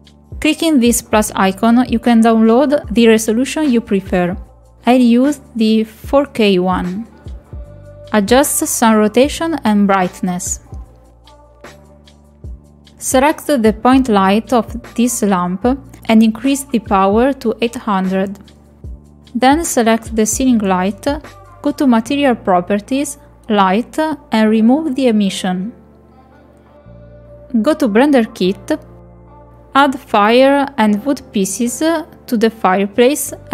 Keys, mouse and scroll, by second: 0.0 click, 0.5 click, 1.9 click, 4.7 click, 8.7 click, 10.7-11.7 drag, 12.8 click, 15.1-16.3 drag, 16.0 KP_0, 18.3 click, 19.9 click, 23.6 click, 24.6 click, 27.6 click, 29.7 click, 32.6 scroll down 2.